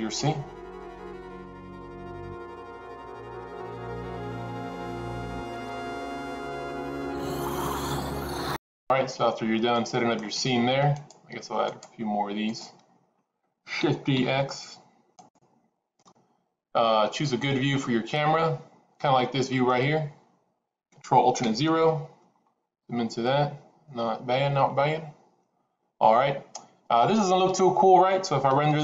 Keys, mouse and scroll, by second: 0.9 middle click, 1.8 click, 2.4-6.5 typing, 2.5 click, 2.8 middle click, 3.8 middle click, 4.0 middle click, 4.1 click, 4.4 middle click, 4.7 middle click, 5.7 middle click, 6.0 middle click, 6.1 click, 6.2 middle click, 6.8 middle click, 9.8 middle click, 11.0 click, 11.7 shift+click, 12.5 click, 14.0 shift+d, 17.6 scroll up 1, 17.6-19.8 middle drag, 21.4 ctrl+alt+KP_0.